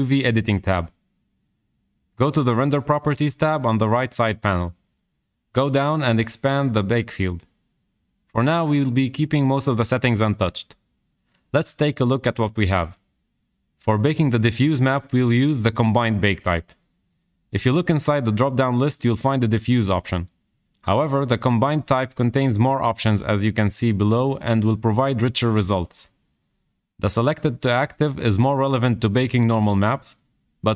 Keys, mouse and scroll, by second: 0.0 click, 0.9-1.4 scroll down 4, 1.8 shift+middle click, 2.7-3.1 scroll down 3, 3.1 shift+middle click, 3.8-4.9 scroll up 3, 19.6-30.7 drag.